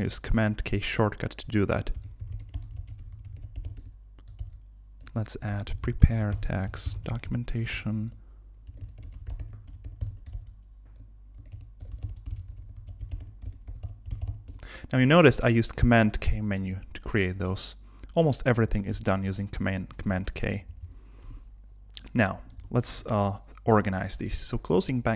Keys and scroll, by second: 3.8 Return, 4.4 super+k, 7.2 Return, 7.7 super+k, 10.1 Return, 10.3 super+k, 13.5 alt+BackSpace, 14.5 Return, 18.9 super+k, 20.5 Down, 21.2 Escape, 22.7 super+Tab.